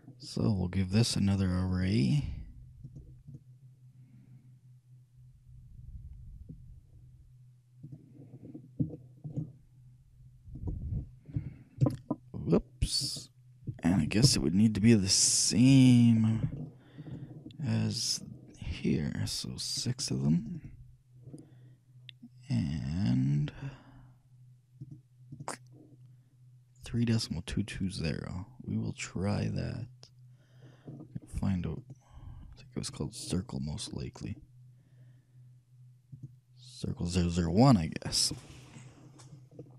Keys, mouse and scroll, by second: 1.3-5.2 drag, 8.5-10.8 middle drag, 10.8-12.5 shift+drag, 13.2-15.0 drag, 16.4-18.5 shift+middle drag, 19.9-22.6 drag, 22.6-24.9 middle drag, 24.9-27.2 drag, 29.8-31.4 drag, 31.9-34.6 right drag, 34.6-36.2 middle drag, 36.2-38.0 drag.